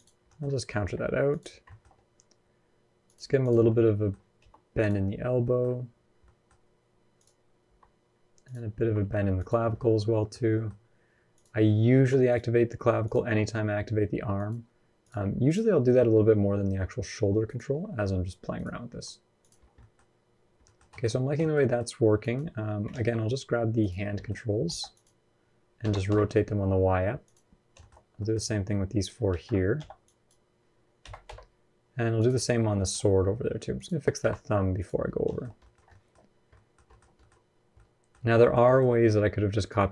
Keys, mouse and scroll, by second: 0.0 middle click, 0.4 r, 1.3 scroll down 1, 1.4 shift+middle click, 2.8 click, 3.2 click, 3.4 middle click, 4.1 r, 5.2 middle click, 6.0 middle click, 6.9 click, 7.4 r, 8.6 r, 9.5 middle click, 10.3 middle click, 10.5-11.0 scroll up 1, 11.1 click, 11.7 r, 12.8 click, 13.0 r, 14.8 click, 15.2 click, 15.8 r, 17.5 r, 19.4-19.8 scroll down 7, 19.5 middle click, 19.8-20.4 scroll up 4, 20.4 middle click, 20.7 shift+middle click, 20.8-21.2 scroll up 7, 21.2 shift+middle click, 21.4 middle click, 22.0 click, 22.7 ctrl+z, 23.6 click, 23.9 shift+middle click, 24.4 b, 27.5 shift+middle click, 27.7 scroll up 2, 27.9 middle click, 29.1 alt+a, 29.5 b, 32.1 scroll down 2, 32.4 shift+middle click, 32.7 scroll up 1, 33.0-33.5 scroll down 1, 33.5 click, 34.0 r, 34.8-35.2 scroll down 7, 35.2 shift+middle click, 35.2 scroll up 3, 35.4 middle click, 35.6 scroll down 1, 35.7 shift+middle click, 36.0-36.3 scroll up 2, 36.3 middle click, 36.6 shift+middle click, 36.8 scroll up 2, 37.0 middle click, 37.5 middle click, 38.0 scroll up 1, 38.0 middle click, 38.5 shift+middle click, 38.6 middle click, 39.4 click, 39.8 click.